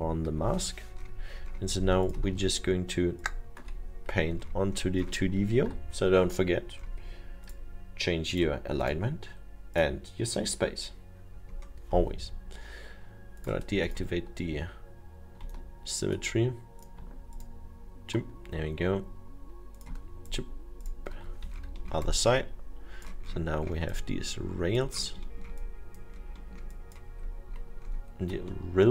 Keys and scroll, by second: 5.6 ctrl+z.